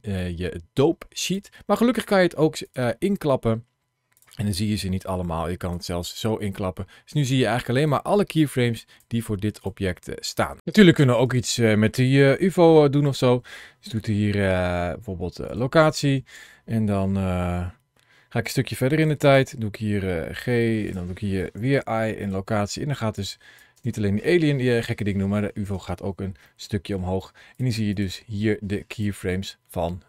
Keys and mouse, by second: 4.0 click, 5.4 click, 7.8 click, 10.1 click, 12.1 g, 12.9 right click, 13.7 i, 18.9 click, 20.2 g, 20.7 click, 21.4 i, 23.0 click, 23.6 space, 25.5 space, 26.3 middle click, 27.8 click, 28.8 click.